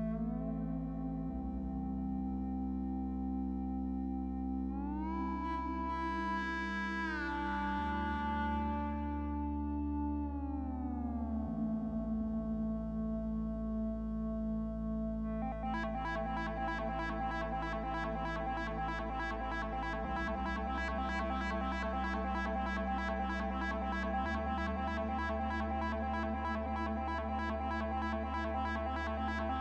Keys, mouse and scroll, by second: 4.2 double click.